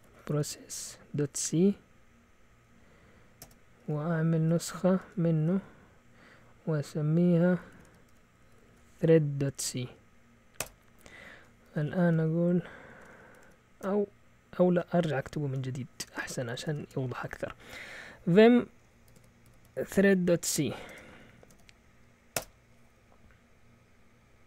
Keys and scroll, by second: 0.0-1.7 typing, 3.4 Return, 4.1-5.9 typing, 7.5-15.1 typing, 16.3-17.2 typing, 18.8-22.0 typing, 22.3 Return.